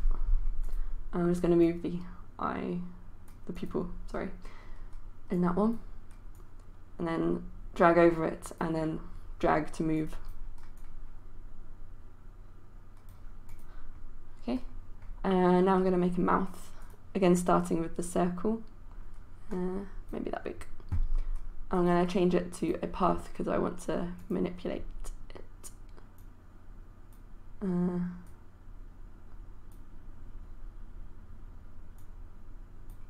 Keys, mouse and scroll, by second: 0.7-33.0 drag.